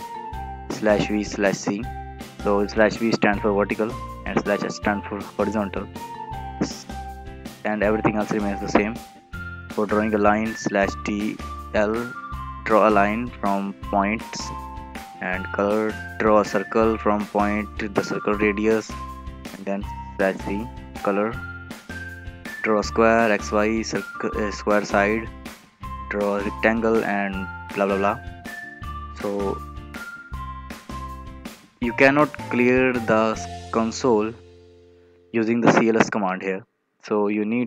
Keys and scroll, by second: 37.3 alt+Tab.